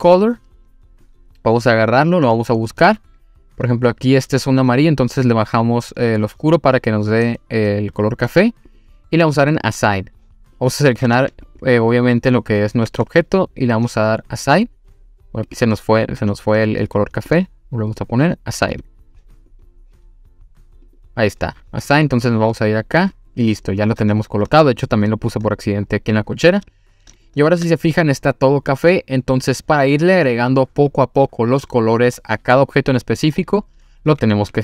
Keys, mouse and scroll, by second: 0.2 click, 9.5 click, 10.6 click, 11.2 Tab, 11.5 click, 12.9 Tab, 15.5 click, 18.7 click, 19.5 click, 20.9 click, 22.6 click, 23.3 scroll down 1, 25.6-26.4 scroll down 1, 26.7-27.1 scroll up 1, 27.2 shift+middle click, 33.0-34.1 scroll up 3, 34.4 click.